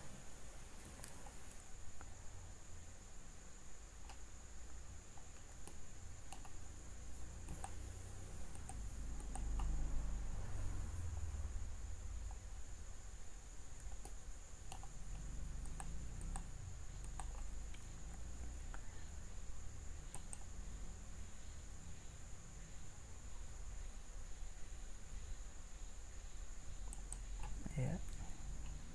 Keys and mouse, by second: 1.4-7.5 middle drag, 7.5-13.0 drag, 13.9 middle click.